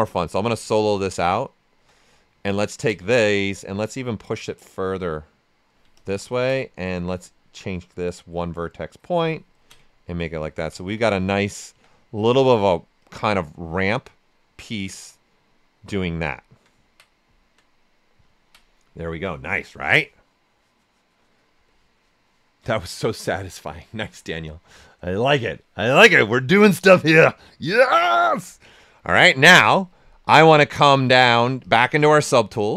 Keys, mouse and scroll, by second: 0.1 click, 0.5 right click, 2.4 ctrl+click, 3.5-7.2 drag, 6.9 typing, 7.2-9.5 drag, 10.4-11.7 typing, 10.7 ctrl+right click, 11.8 right click, 13.0 click, 13.4 right click, 15.1-16.4 right drag, 16.3 typing, 16.4 alt+right click, 17.9 right click, 18.3 ctrl+right click, 20.2-20.9 typing, 30.3-32.7 drag, 30.3 typing.